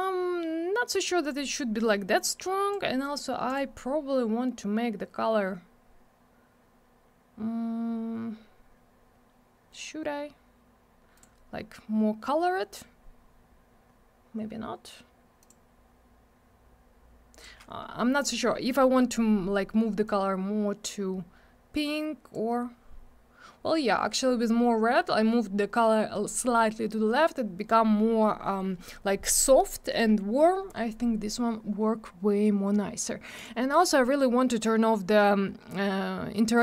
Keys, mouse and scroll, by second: 1.2 click, 2.4 click, 3.4 click, 11.1 click, 15.4 click, 17.3 click, 20.0 click, 33.3 click, 34.7 scroll up 1, 35.4 scroll down 1.